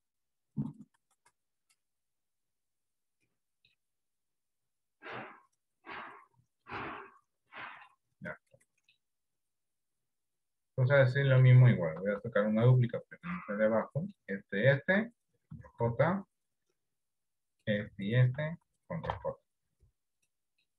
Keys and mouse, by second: 1.6 click, 2.8-3.8 middle drag, 4.6 r, 7.1 middle click, 8.7 middle click, 11.1 middle click, 12.2 shift+d, 14.0 middle click, 15.9 ctrl+j, 19.2 ctrl+j.